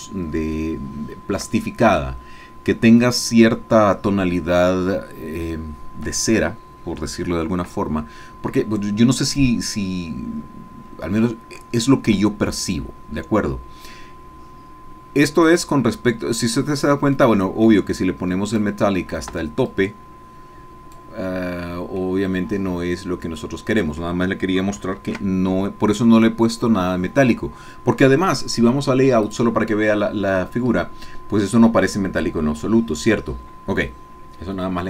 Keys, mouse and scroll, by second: 0.6 shift+click, 1.5 shift+middle click, 8.9-9.4 scroll down 2, 9.5 middle click, 9.6-12.5 drag, 17.1 click, 18.5 click, 19.3 Escape, 19.7-21.4 drag, 21.4-21.9 scroll down 1, 22.0 middle click, 22.6-24.2 drag, 24.2-24.8 scroll down 1, 25.1 ctrl+z, 29.5 click.